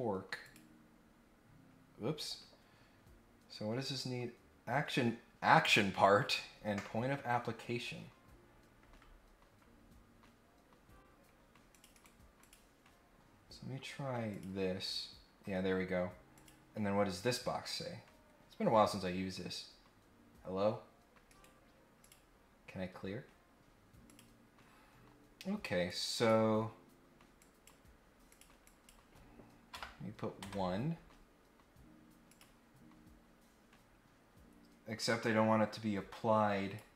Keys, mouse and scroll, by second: 0.4 click, 11.7 click, 11.9 right click, 12.3 click, 12.9-13.4 scroll up 2, 14.2 click, 16.3 click, 21.2 right click, 21.9 click, 24.0 click, 25.8 click, 27.3 click, 28.2 click, 28.6 click, 32.3 click, 33.4 scroll up 2, 34.9-36.7 drag.